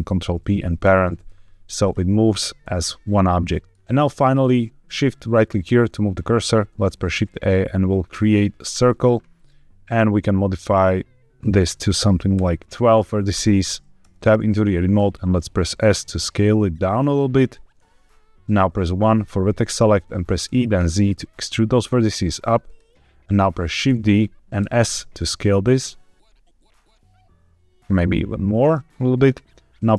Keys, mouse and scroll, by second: 1.7 click, 2.5 g, 3.1 Escape, 3.6 middle click, 3.6 scroll down 1, 5.2 shift+right click, 6.6 shift+a, 9.8 click, 11.3-12.3 drag, 13.9 Tab, 14.8 s, 17.3 click, 18.7 1, 20.3 e, 20.7 z, 22.5 click, 23.7 shift+d, 24.5 s, 29.1 click, 29.8 f.